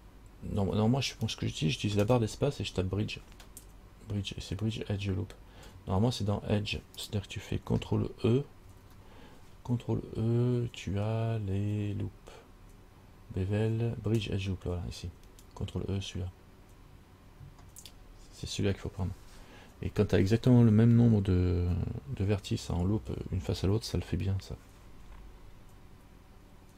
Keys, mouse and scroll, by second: 2.2 space, 8.8 ctrl+e.